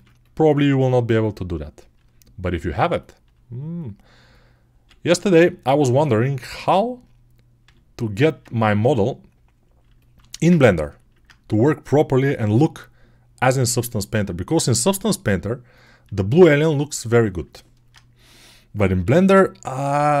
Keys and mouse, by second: 1.1 click, 1.8-13.8 middle drag, 1.8 g, 3.1 g, 4.8 g, 7.5 g, 8.8 g, 12.2 g, 13.8 click, 14.5-15.6 middle drag, 14.5 g, 15.6 click, 15.9-16.9 middle drag, 15.9 g, 16.9 click, 17.3-19.9 alt+middle drag, 18.9 g, 19.9 right click, 20.0-20.2 middle drag.